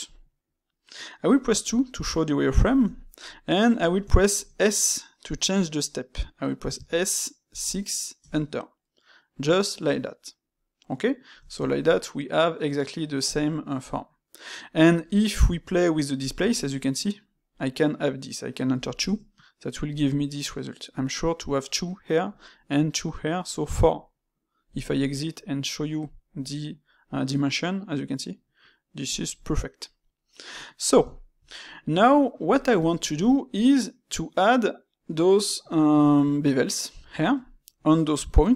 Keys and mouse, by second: 2.7-7.2 ctrl+middle drag, 10.7-16.3 middle drag, 20.0-23.0 middle drag, 25.7 click, 29.0 click, 29.9-35.9 middle drag.